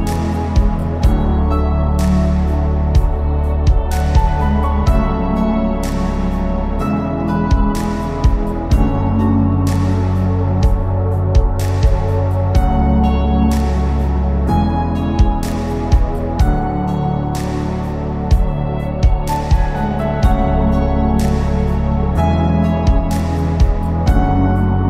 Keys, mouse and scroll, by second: 0.0 click, 0.7 g, 1.9-2.7 scroll down 8, 2.2 Tab, 2.7 middle click, 3.1-4.2 scroll up 5, 3.4 shift+middle click, 4.0 click, 4.2 Tab, 5.3 alt+click, 5.6 middle click, 6.1 shift+middle click, 6.5 scroll up 1, 6.7 scroll down 1, 7.0 g, 8.7 click, 8.9 scroll down 1, 9.1 KP_3, 9.3-10.8 scroll up 8, 9.8 shift+middle click, 10.3 click, 10.8 click, 11.3 g, 12.5 g, 14.1 click, 14.2 g, 15.7-16.2 scroll down 5, 16.2-16.7 scroll down 5, 16.4 Tab, 16.7 middle click, 17.0 shift+middle click, 17.2-17.7 scroll up 5, 17.7 click, 18.0 Tab, 19.8 alt+click, 20.1 click, 20.4 click, 20.9 scroll down 5, 21.6 shift+s, 22.6 shift+d, 24.5 p.